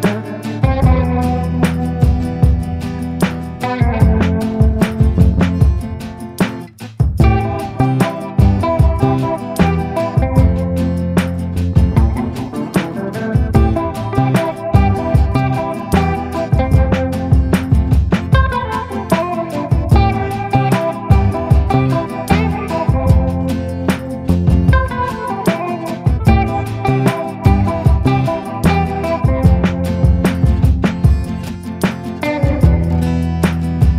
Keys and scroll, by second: 2.0 Escape, 5.2 Escape, 8.2 space, 9.8 ctrl+u, 10.0 Escape, 11.1 e, 11.4 Escape, 11.6 F2, 13.0 ctrl+q, 17.6 space, 18.4 e, 18.8 Escape, 21.4 space, 22.1 Delete, 26.8 e, 27.0 F3, 27.1 Escape, 28.5 l, 28.9 Escape.